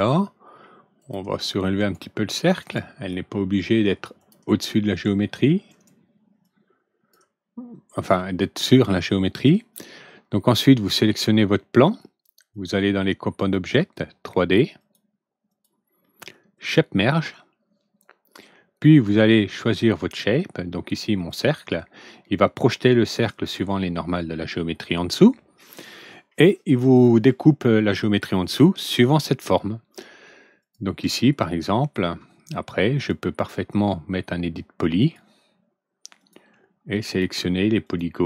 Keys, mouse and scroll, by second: 0.9 click, 1.7 right click, 2.5 right click, 4.1 click, 5.6 right click, 6.4 click, 7.9 click, 9.2 click, 11.8 click, 12.4 click, 13.3 click, 13.7 click, 14.3 click, 14.7 click, 15.4 click, 16.5 click, 18.8 click, 21.0 click, 30.5 click, 32.9 click, 34.9 click, 36.1 click, 37.0 click, 37.8 click.